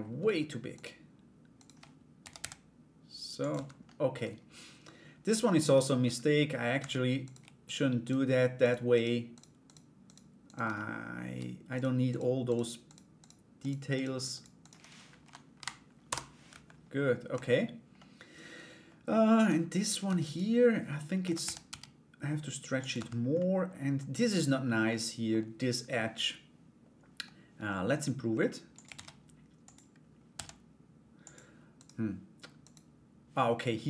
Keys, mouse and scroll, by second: 0.3 shift+right click, 1.1 shift+right click, 1.9 s, 3.1 Tab, 3.4 middle click, 4.9 right click, 5.3 /, 5.6 middle click, 6.3 Tab, 6.8 right click, 7.2 shift+right click, 7.6 shift+right click, 8.2 shift+right click, 8.5 shift+right click, 8.9 shift+right click, 9.2 right click, 9.6 shift+right click, 10.0 shift+right click, 10.3 middle click, 11.3 shift+right click, 11.6 shift+right click, 12.0 shift+right click, 12.4 shift+right click, 12.8 shift+right click, 13.2 shift+right click, 13.5 shift+right click, 13.9 shift+right click, 14.2 shift+right click, 14.8 End, 15.1 Delete, 16.1 /, 16.9 Tab, 17.5-18.7 middle drag, 18.9 right click, 19.8 right click, 20.8 a, 21.0 s, 22.5 Tab, 22.9 middle click, 24.4 middle click, 28.3 click, 28.5 shift+a, 29.9 s, 31.3 right click, 32.2 right click.